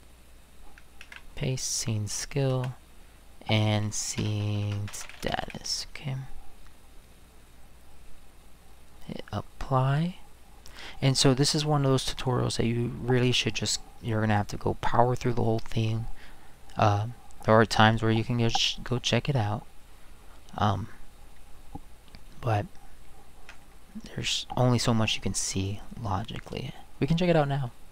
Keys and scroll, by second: 1.0 ctrl+v, 2.5 space, 4.2-5.9 typing.